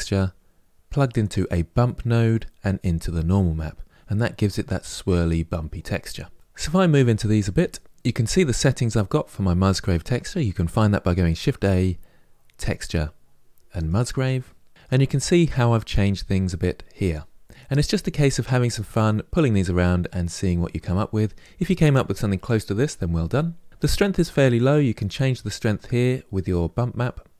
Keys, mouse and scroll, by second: 1.1 click, 24.7-27.3 drag.